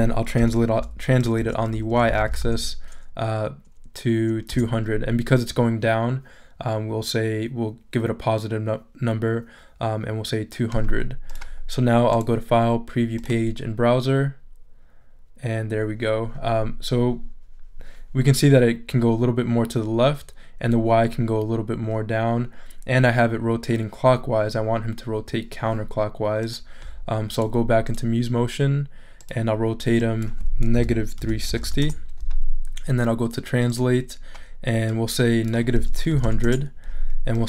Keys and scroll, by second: 0.4-2.8 typing, 4.5 Return, 30.5-32.1 typing, 35.7 2, 36.1 0, 36.4 Return.